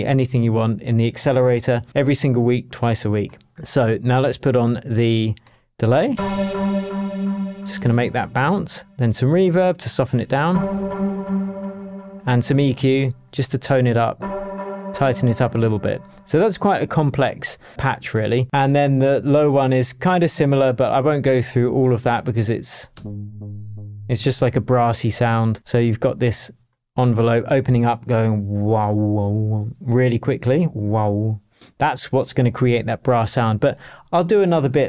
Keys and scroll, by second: 22.9 space, 24.1 space.